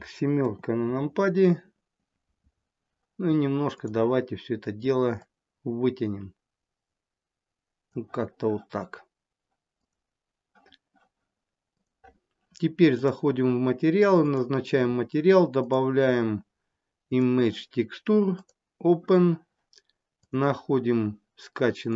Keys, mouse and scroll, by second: 0.5 KP_7, 1.0 scroll up 8, 2.5-3.1 scroll down 2, 3.3 scroll down 3, 3.7 click, 5.2 click, 9.8 click, 11.7 click, 13.0 click, 14.2 click, 15.5 click, 18.2 click.